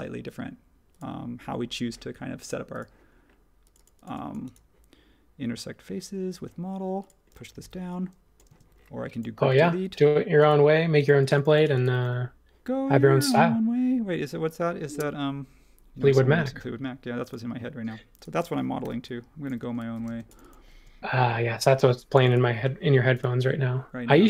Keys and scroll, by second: 7.6 p, 8.5 space, 18.8-20.8 typing, 21.5 super+1.